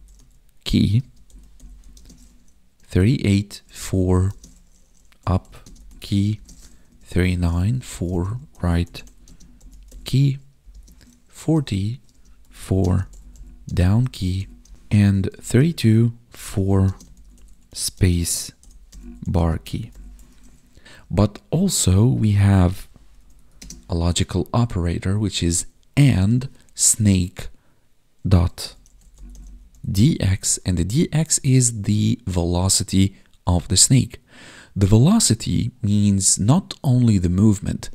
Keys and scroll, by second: 1.0 space, 1.9 space, 3.6 space, 4.2 space, 5.6 space, 6.3 space, 7.2 space, 8.0 space, 9.2 space, 10.6 space, 12.1-15.5 typing, 16.8 space, 17.9 space, 19.3 space, 20.3 ctrl+s, 20.9 space, 23.5 space.